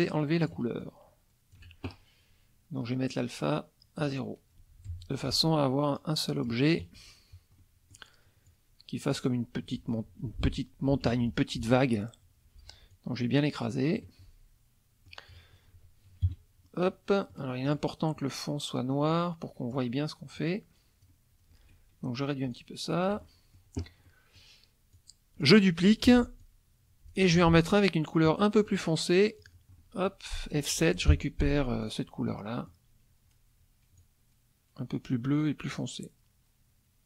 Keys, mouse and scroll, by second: 0.8 shift+click, 2.8 right click, 4.0 click, 4.9 F1, 5.2-6.6 drag, 6.8 KP_Subtract, 7.6 middle click, 8.5-9.3 drag, 9.8 click, 10.2 F2, 11.0 F1, 12.9-14.1 drag, 14.2-15.3 drag, 16.2 KP_Subtract, 16.9 click, 17.6 click, 19.1-19.9 drag, 20.4-21.2 drag, 22.5 shift+click, 24.1 middle click, 24.9-25.6 drag, 26.0 ctrl+d, 26.4-27.3 ctrl+drag, 27.3 F2, 28.3 middle click, 29.4 click, 29.8 middle click, 30.8 F7, 31.8 click, 32.4 middle click, 34.0-37.0 drag.